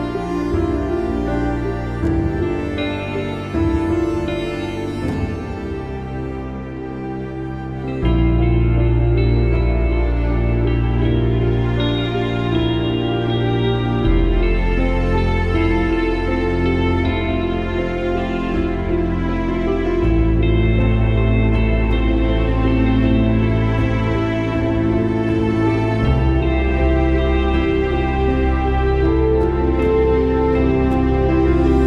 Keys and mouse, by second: 0.7 click, 4.0 click, 4.8 click, 6.6 click, 8.8 click, 8.9 e, 9.2 space, 10.4 click, 11.9 click, 13.3 click, 15.0 alt+click, 23.1 click, 24.2 click, 25.3 click, 26.0 Delete, 26.5 click, 27.5 click, 27.8 Delete, 28.6 click, 29.7 space, 29.8 click, 30.0 space, 31.3 click.